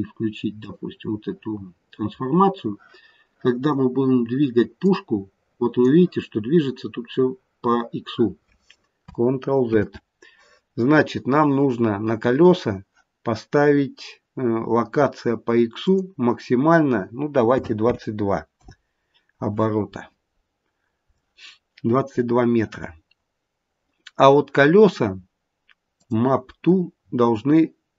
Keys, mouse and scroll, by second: 0.5 click, 4.7 click, 9.6 ctrl+z, 12.1 click, 15.7 click, 17.7 KP_2, 21.7-25.1 scroll down 6, 25.9 click, 26.5-27.9 scroll down 6.